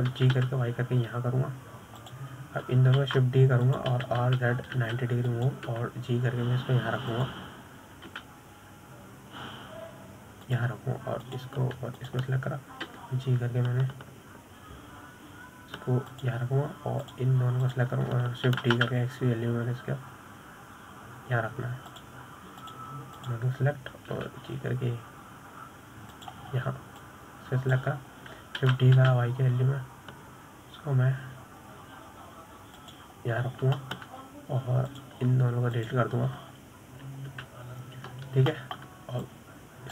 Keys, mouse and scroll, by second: 1.1 click, 1.6 shift+click, 2.5 g, 5.4 shift+d, 6.3 r, 8.1 g, 10.5 g, 13.6 click, 14.4 shift+click, 15.2 g, 19.4 click, 20.0 shift+click, 20.9 shift+d, 25.0 click, 25.5 shift+click, 26.5 g, 28.9-29.4 scroll down 1, 29.4 click, 31.0 shift+d, 35.8-36.1 scroll up 3, 36.1-37.3 shift+middle drag, 37.3 click, 38.1 shift+click, 39.7 Delete.